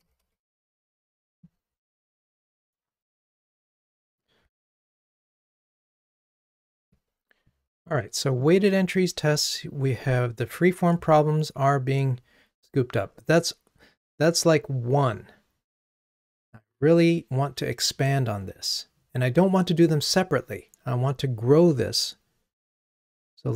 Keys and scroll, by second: 6.9 super+1.